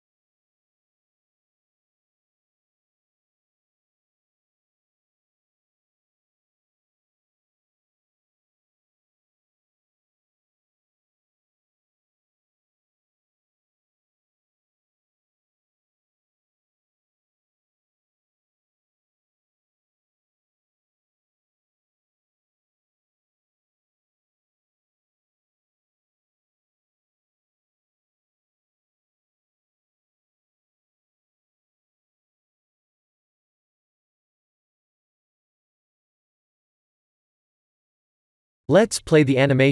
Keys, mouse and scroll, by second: 14.2 click, 19.3 F12, 33.6 ctrl+s, 37.7 click, 39.3 click.